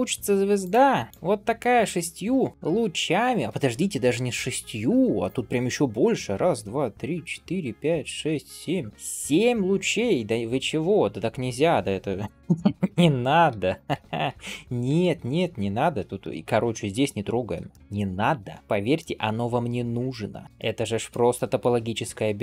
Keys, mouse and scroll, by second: 0.1 1, 0.5 click, 1.1 g, 1.5-1.8 scroll up 1, 3.5-6.5 scroll up 1, 12.8-13.4 scroll down 2, 13.4 ctrl+z, 13.8 ctrl+z, 15.6 scroll down 1, 16.1 shift+middle click, 16.4-16.8 scroll up 1, 17.2 scroll down 1, 17.6 shift+middle click, 18.0 middle click, 18.6 shift+middle click, 20.4 shift+middle click, 21.2 shift+middle click, 21.8 middle click.